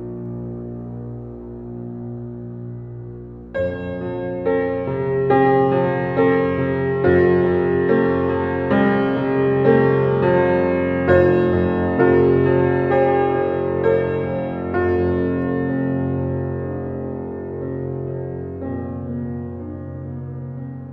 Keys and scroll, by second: 0.0 shift+a.